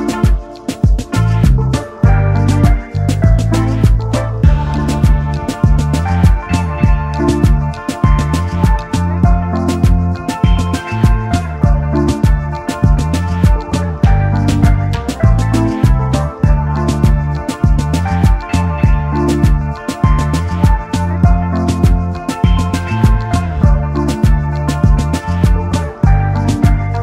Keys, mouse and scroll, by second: 4.3 double click, 5.2 double click, 7.4 double click, 8.2 right click, 8.9 double click, 10.0 ctrl+z, 10.4 double click, 13.3 right click, 14.6 double click, 14.7 space, 14.8 double click, 18.4 alt+shift+click, 21.5 shift+click, 24.2 double click, 25.3 Return, 26.4 alt+scroll up 1.